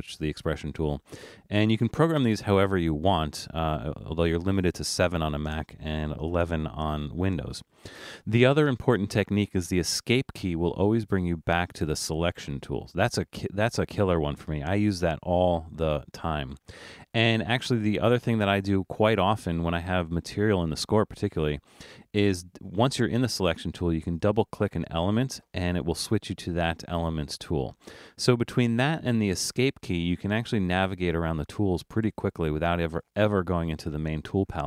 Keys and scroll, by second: 9.9 Escape, 29.5 Escape, 32.1 Escape.